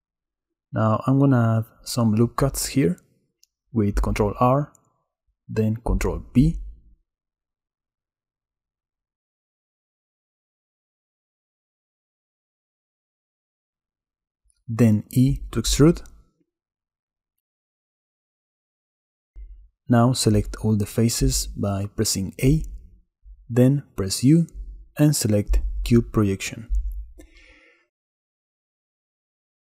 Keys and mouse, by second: 0.6 Tab, 2.5 ctrl+r, 4.6 ctrl+b, 7.7 ctrl+r, 10.1 click, 10.5 ctrl+b, 12.2-12.9 drag, 14.0 click, 15.1 e, 18.6 x, 20.0 z, 20.4 a, 22.6 u, 28.6 Tab.